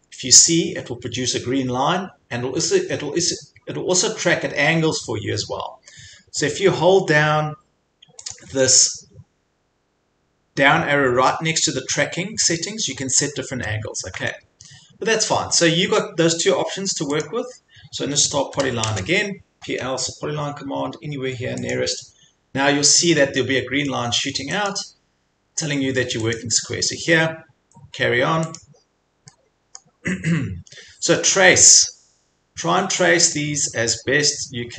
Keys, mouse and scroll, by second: 8.3-13.4 drag, 14.1 Escape, 17.2 click, 18.3-19.2 typing, 21.8 click, 24.7 click, 26.4 click, 28.6 click, 28.9 click, 29.0 scroll, 29.8-30.3 scroll, 30.7 scroll, 33.4 click.